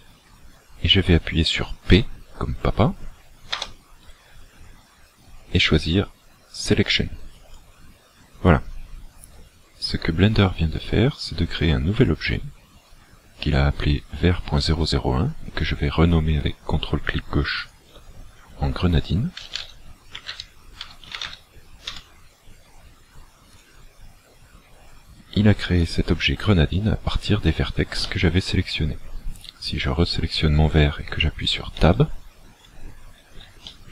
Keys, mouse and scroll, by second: 3.6 p, 12.0 click, 17.6 ctrl+click, 23.6 click, 25.8 click, 26.6 click, 27.2-27.8 scroll down 4, 28.0 middle click, 31.8 Tab, 33.7 shift+middle click.